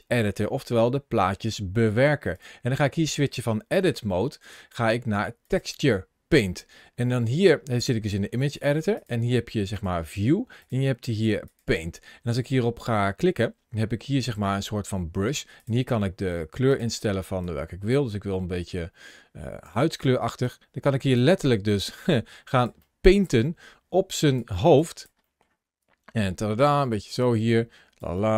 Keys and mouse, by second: 2.1-5.4 drag, 8.8-9.8 drag, 10.5-11.5 drag, 16.5 click, 19.7 click, 20.3 click, 21.3 middle click, 21.7 click, 22.6 middle click, 23.2-24.2 drag, 24.6 click, 25.1 middle click, 25.7-27.9 drag, 28.1 middle click.